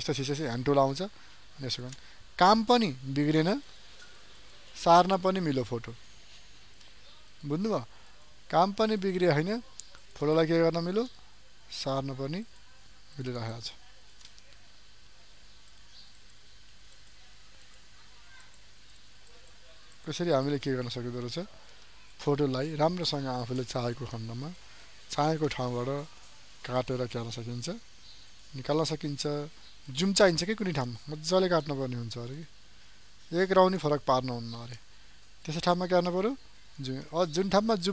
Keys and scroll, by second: 29.8 ctrl+space, 37.0 ctrl+space.